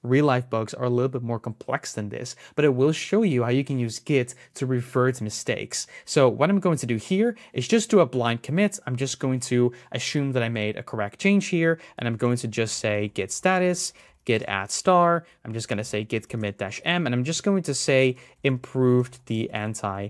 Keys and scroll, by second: 6.8 super+s.